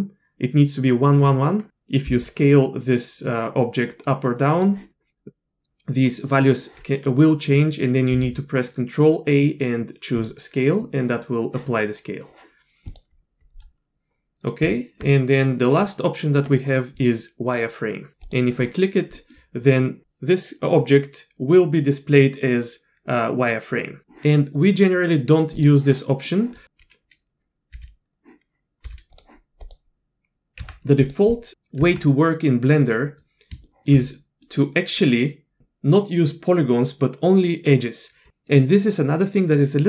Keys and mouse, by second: 2.1 s, 8.1 ctrl+a, 12.9 click, 14.6 Tab, 18.2 click, 19.2 click, 25.6 click, 26.1 middle click, 27.7 q, 28.8 q, 29.7 click, 30.6 Tab, 31.0 click, 31.8 Tab, 32.3 click, 33.7 shift+drag, 34.2 click, 35.0 click.